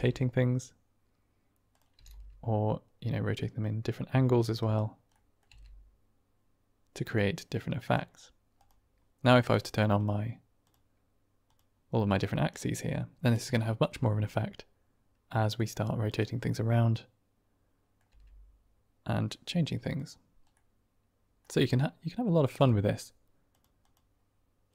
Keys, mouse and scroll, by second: 1.7 click, 1.9 r, 2.1 r, 4.1 middle click, 4.6 right click, 5.0-5.3 middle drag, 5.5 r, 9.6 click, 12.5-12.9 middle drag, 12.9 click, 13.1 shift+middle drag, 13.4 middle click, 13.5 click, 13.9 r, 16.8 click, 17.0 middle click, 17.1 click, 17.2 middle click, 17.3-17.8 drag, 17.8 middle click, 18.7 r, 20.8-21.4 drag.